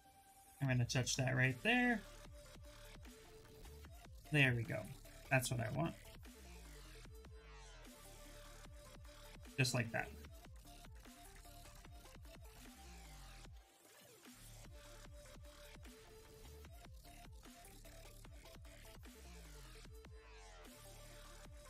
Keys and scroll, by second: 2.0 s, 7.4 ctrl+z, 15.2 ctrl+z.